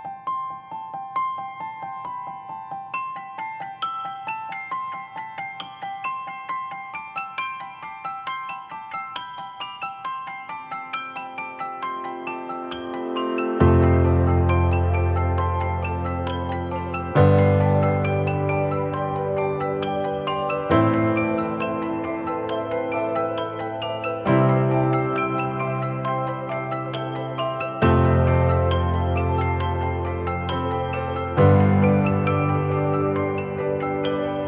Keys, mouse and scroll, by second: 1.1 alt+click, 9.7 right click, 11.6 typing, 12.2 double click, 14.7 typing, 15.1 double click, 17.3 typing, 17.6 double click, 19.7 typing, 20.1 double click, 21.6 typing, 22.0 double click, 26.0 typing, 28.1 double click, 30.2 right click, 31.5 double click.